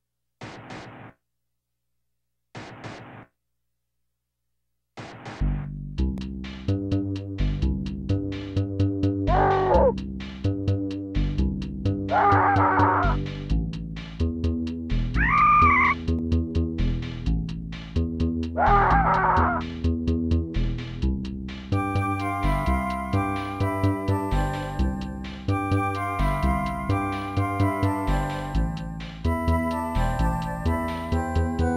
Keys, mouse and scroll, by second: 0.5 ctrl+s, 1.1 click, 1.1 click, 1.8 scroll up 1, 2.3 right click, 2.7 right click, 3.0 right click, 3.4 right click, 4.4 right click, 4.5 shift+right click, 4.9 right click, 5.0 shift+right click, 5.4 right click, 5.5 shift+right click, 5.7 right click, 5.7 shift+double right click, 6.6 scroll down 2, 6.9 middle click, 9.0-9.6 scroll up 3, 9.6 right click, 9.7 shift+right click, 10.2 right click, 10.3 shift+right click, 10.5 right click, 10.6 shift+right click, 10.8 right click, 11.0 shift+right click, 12.0 right click, 12.1 shift+right click, 12.4 right click, 12.5 shift+right click, 12.9 middle click, 13.8 right click, 13.9 shift+right click, 14.2 right click, 14.4 shift+right click, 15.6 right click, 15.7 shift+right click, 16.0 right click, 16.1 shift+right click, 16.3 right click, 16.4 shift+right click, 16.6 right click, 16.7 shift+right click, 17.0 right click, 17.1 shift+right click, 19.0 right click, 19.1 shift+right click, 19.3 right click, 19.4 shift+right click, 20.0 right click, 20.2 shift+right click, 20.6 right click, 20.7 shift+right click, 21.0 right click, 21.1 shift+right click, 21.4 right click, 21.5 shift+right click, 22.2 right click, 22.3 shift+right click, 23.3 right click, 23.4 shift+right click, 23.7 right click, 23.8 shift+right click, 24.0 right click, 24.1 shift+right click, 24.4 right click, 24.4 shift+right click, 24.8 right click, 24.8 shift+right click, 25.2 right click, 25.3 shift+right click, 26.0 right click, 26.1 shift+right click, 26.6 right click, 26.8 shift+right click, 27.9 ctrl+s, 28.1 click, 28.2 click, 28.9 middle click, 30.0 right click, 30.1 shift+right click, 30.6 right click, 30.7 shift+right click, 31.3 right click, 31.4 shift+right click, 31.6 right click, 31.7 shift+right click.